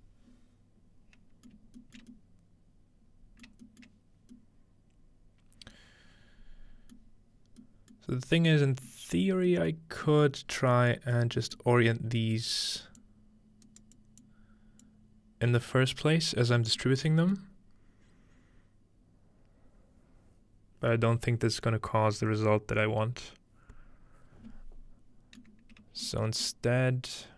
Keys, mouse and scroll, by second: 2.0 shift+middle click, 3.5 shift+middle click, 3.9 shift+middle click, 7.1-7.6 middle drag, 8.4 middle click, 8.9 middle click, 9.2-11.1 scroll down 3, 11.1 scroll up 2, 12.0 scroll up 2, 13.0-14.0 drag, 13.7 right click, 14.2-16.2 drag, 16.2-18.1 scroll down 2, 16.8-25.4 middle drag, 25.8 shift+middle click, 26.3 shift+middle click.